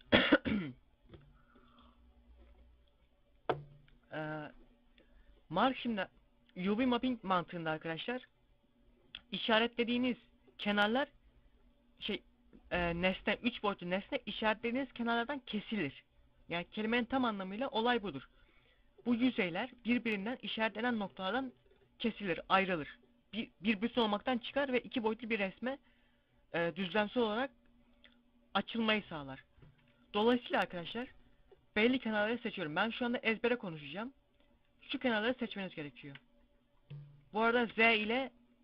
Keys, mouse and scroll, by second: 7.8 middle click, 8.3 scroll up 1, 10.9 scroll up 1, 30.3 right click, 31.4 shift+right click, 36.7 scroll up 2, 37.0 scroll down 2, 37.5 z, 37.9 z.